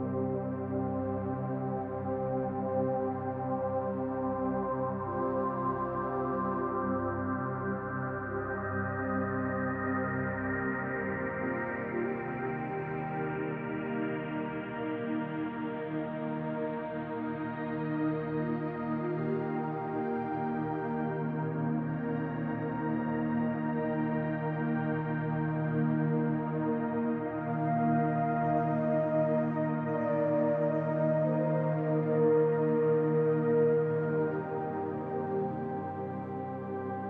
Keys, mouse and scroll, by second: 2.0 middle click, 3.5 click, 4.6 i, 6.5 click, 7.0 i, 9.0 middle click, 10.2 click, 10.5 i, 12.6 middle click, 13.5 shift+click, 13.9 shift+click, 14.3 middle click, 15.0 shift+click, 15.3 middle click, 17.4 e, 23.8 s, 29.9 middle click, 31.1 Delete, 33.3 middle click, 34.0 scroll up 2, 34.6 shift+middle click, 35.1 middle click, 36.1 middle click, 36.2 shift+middle click.